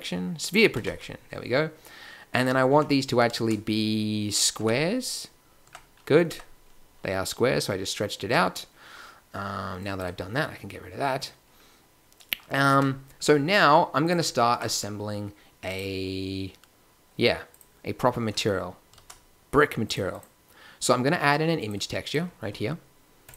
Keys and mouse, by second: 0.7 s, 2.8 Tab, 3.9 shift+z, 4.6 Tab, 5.6 Tab, 6.3 Tab, 8.2 Tab, 9.8-11.1 middle drag, 11.5-12.7 drag, 17.5-18.9 drag, 18.9 shift+a, 23.2 click.